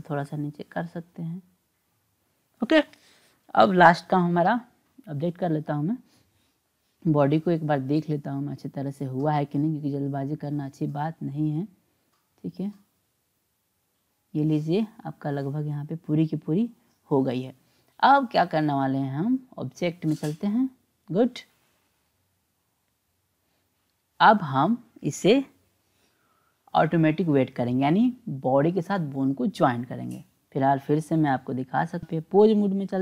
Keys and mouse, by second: 0.8-2.0 drag, 4.4 click, 6.8 click, 8.4-10.1 drag, 11.9 click, 13.0-18.7 drag, 20.0 click, 23.1-24.1 drag, 30.2 click, 31.6-32.5 drag.